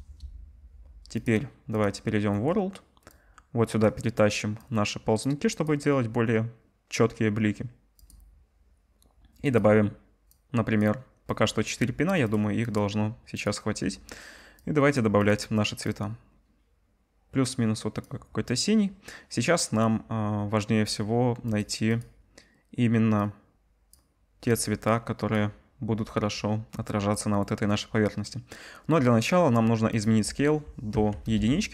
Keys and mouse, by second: 12.8 click, 15.3-21.6 drag, 22.0-29.9 drag.